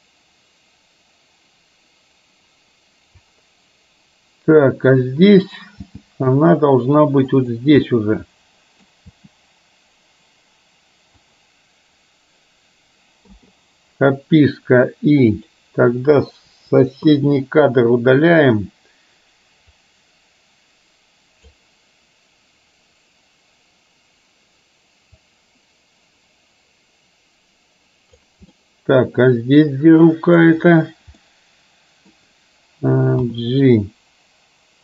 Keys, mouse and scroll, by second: 5.8 g, 8.0-9.0 middle drag, 9.2 g, 15.5 click, 16.6 Delete, 17.2-18.3 middle drag, 19.8 click, 25.2-28.3 drag, 28.6-30.5 middle drag, 31.2-32.2 middle drag, 33.3 g.